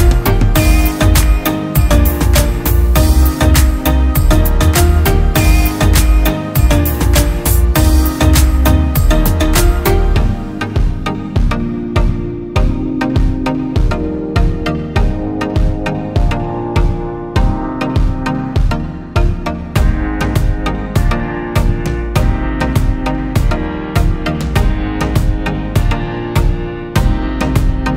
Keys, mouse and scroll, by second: 1.7 alt+click, 11.6 double click, 17.1 [, 17.2 [, 17.4 [, 18.3 [, 19.6 ], 20.3 double click, 25.5 double click, 27.6 double click.